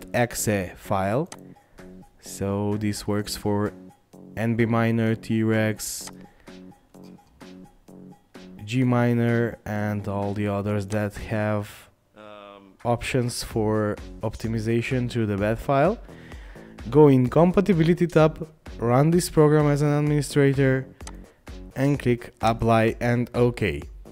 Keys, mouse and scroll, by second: 23.7-24.1 scroll up 1.